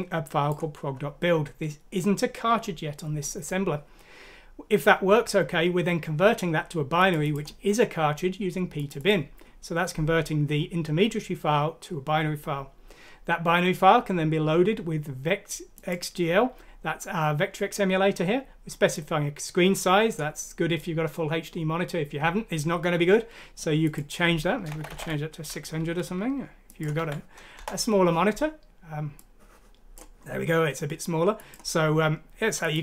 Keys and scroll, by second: 24.7 BackSpace, 24.9 BackSpace, 25.0 6, 27.5 Return.